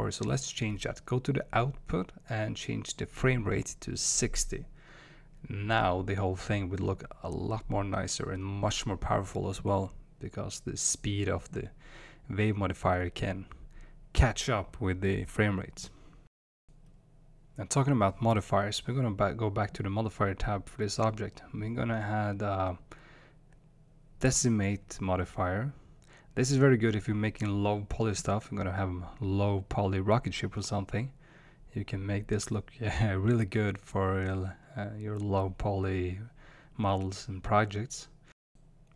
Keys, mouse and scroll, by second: 3.8-5.6 drag, 13.1 space, 20.5-30.1 drag, 31.3-38.9 drag.